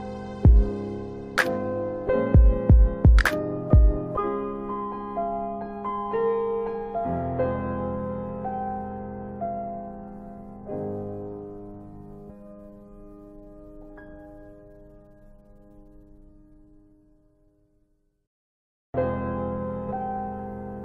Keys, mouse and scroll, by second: 0.3 click, 2.0 middle click, 3.3 click, 6.2 shift+click, 8.2 alt+x, 10.1 click, 11.8 click, 15.2 middle click, 17.0 click.